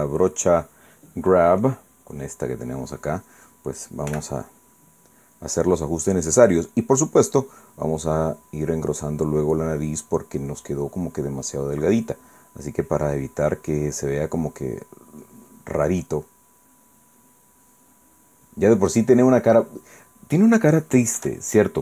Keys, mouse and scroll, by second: 5.1 f, 6.2 click, 8.2-9.7 drag, 10.0 click, 11.3 click, 12.7 click, 13.3 click, 15.0 click, 16.5 click, 17.3 click, 18.7-21.3 middle drag.